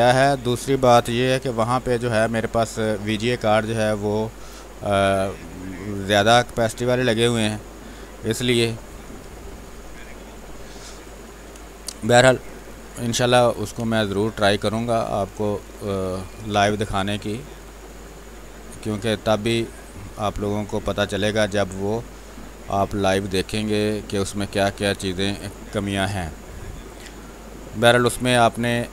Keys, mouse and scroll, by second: 2.4 ctrl+space, 2.5 click, 3.4 click, 7.8 space, 8.1 alt+click, 10.4 ctrl+alt+z, 11.5 ctrl+space, 11.7 ctrl+click, 12.7 r, 12.8 click, 13.5 b, 13.8 space, 14.1-19.0 ctrl+drag, 19.0 space, 19.2 alt+click, 22.4-26.4 ctrl+drag, 27.2-28.9 drag.